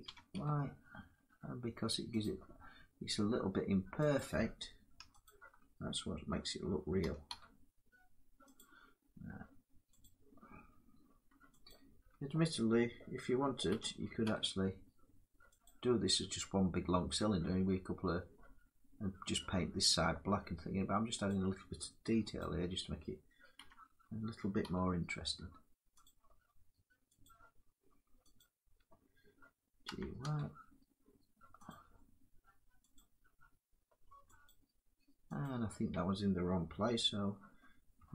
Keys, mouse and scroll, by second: 1.8 click, 3.8 click, 4.9 alt+click, 6.6 g, 7.0 y, 8.2 click, 9.6 click, 11.3 alt+click, 13.3 g, 15.3 click, 16.6 scroll down 3, 19.0 scroll up 1, 20.9 click, 22.0 alt+click, 23.2 g, 24.3 y, 25.7 click, 27.0 click, 28.0 alt+click, 29.5 g, 29.8 y, 31.3 click, 32.6 click, 34.1 alt+click, 35.0 click, 37.9 click.